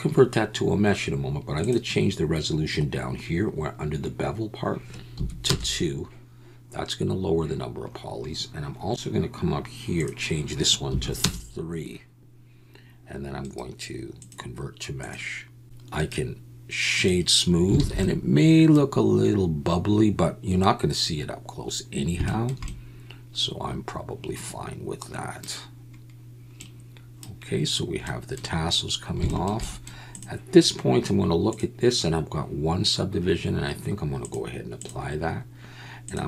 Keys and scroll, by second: 17.8 alt+a.